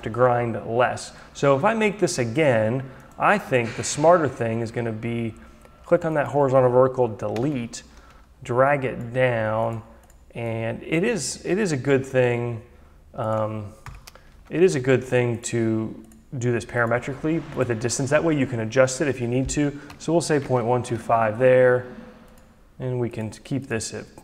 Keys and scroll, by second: 6.9 Delete, 13.4 Delete, 14.9 d, 19.4 Delete, 20.4 2, 20.9 Return.